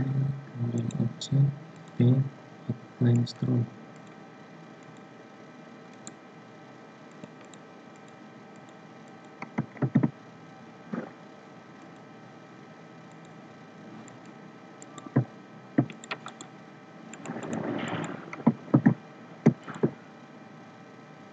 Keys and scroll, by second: 9.8 ctrl+z, 18.7 ctrl+z.